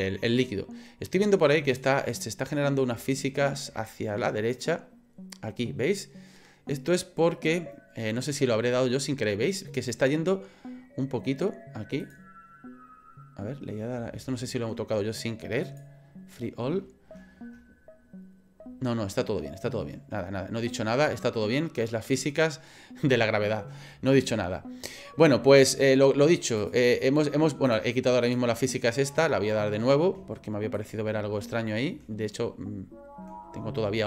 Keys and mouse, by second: 1.7 click, 26.6 click, 27.7 click, 28.2 click, 30.9-34.0 drag.